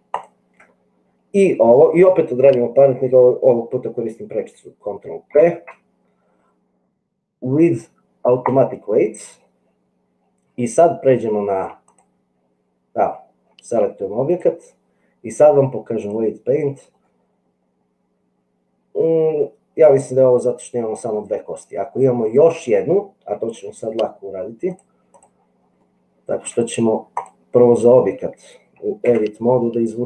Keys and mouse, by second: 5.4 ctrl+p, 11.8 click, 14.4-16.2 drag, 17.1-21.3 middle drag, 24.7 click, 26.0 shift+middle click, 29.3 Tab.